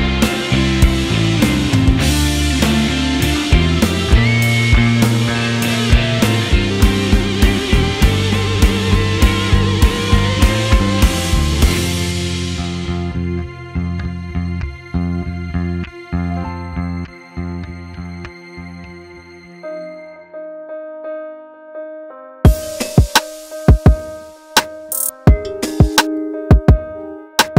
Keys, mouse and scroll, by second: 0.0 middle click, 0.1 click, 0.2 middle click, 0.5 click, 1.2 r, 1.6 middle click, 1.8 click, 2.1 middle click, 2.2 `, 2.4 middle click, 2.5 scroll down 1, 2.7 click, 2.9 shift+middle click, 3.1 click, 3.4 click, 3.5 middle click, 3.7 click, 3.8 middle click, 4.0 KP_1, 4.1 scroll down 5, 4.3 scroll up 10, 4.4 middle click, 4.5 shift+middle click, 4.8 click, 5.1 middle click, 5.6 middle click, 5.6 scroll down 4, 5.7 scroll up 12, 5.9 click, 6.2 x, 6.5 ctrl+z, 6.9 scroll down 2, 6.9 middle click, 7.3 e, 7.6 middle click, 7.8 click, 8.1 x, 8.2 scroll down 3, 8.2 middle click, 8.4 KP_1, 8.7 middle click, 9.3-9.8 scroll up 10, 9.5 middle click, 9.8 click, 10.4 middle click, 10.6 KP_1, 10.7 scroll up 1, 10.7 scroll down 5, 11.2 ctrl+click, 11.8 Tab, 11.9 click, 12.1 Tab, 12.9 right click, 13.2 click, 13.3 scroll up 1, 13.9 scroll down 2, 13.9 shift+middle click, 14.1 scroll up 1, 14.2 shift+middle click, 14.3 click, 14.5 middle click, 15.0 click, 15.1 middle click, 15.2 scroll down 4, 15.3 shift+middle click, 15.8 click, 16.0 p, 16.2 Tab, 16.3 click, 16.8 click, 17.0 Tab, 17.1 Tab, 17.2 click, 17.4 Tab, 17.4 middle click, 17.9 scroll up 4, 17.9 shift+middle click, 18.2 click, 18.6 shift+s, 18.8 middle click, 19.2 click, 20.1-21.8 typing, 20.8 click, 21.5 scroll down 3, 21.6 shift+middle click, 22.6 middle click, 22.7 scroll up 7, 23.0 alt+shift+click, 23.1 s, 23.5 scroll down 3, 23.6 middle click, 24.4 middle click, 25.5 scroll up 3, 25.6 middle click, 26.0 ctrl+z, 26.1 ctrl+z, 26.3 ctrl+z, 26.4 ctrl+z, 26.5 middle click, 26.6 scroll up 4, 26.7 middle click, 26.9 Tab, 27.2 alt+click, 27.4 shift+s.